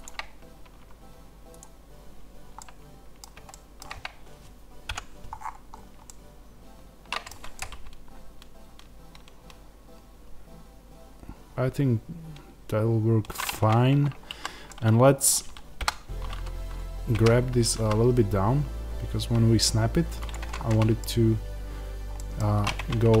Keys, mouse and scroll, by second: 2.5-5.2 middle drag, 4.8 KP_Decimal, 5.2-5.9 scroll down 2, 5.9-23.2 middle drag, 7.2 Tab, 13.4 Tab, 13.9-14.2 scroll up 2, 14.2 a, 15.7 KP_1, 17.0 g, 20.3 Tab, 21.0-22.0 scroll down 2, 22.6 Tab.